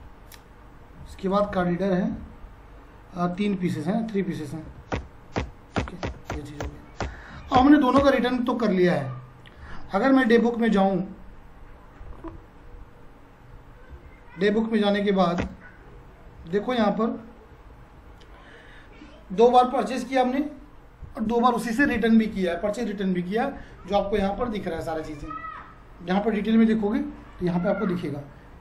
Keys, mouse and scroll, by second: 1.3 click, 4.6 3, 4.9 Return, 13.9 d, 15.0 Down, 15.4 Return, 17.5 alt+F1.